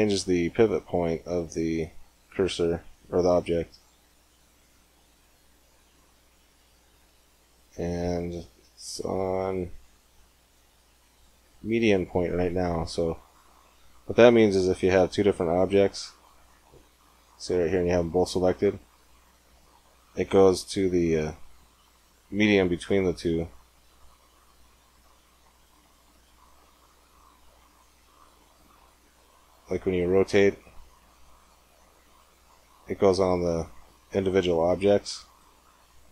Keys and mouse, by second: 12.7-14.1 middle drag, 14.1 shift+a, 15.7 g, 17.4-19.4 right drag, 20.4-22.2 drag, 24.2-26.2 drag, 28.2-30.7 drag, 28.8 r.